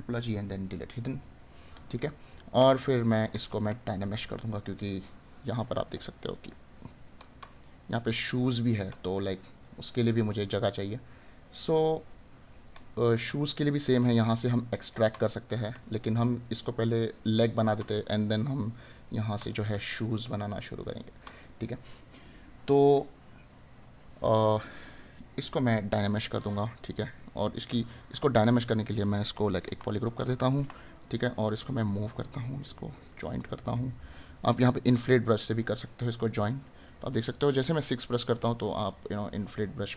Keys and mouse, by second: 1.8 right click, 7.1 right click, 10.9 right click, 18.9 right click, 24.6 right click, 26.5 right click, 31.2 right click, 39.4 right click.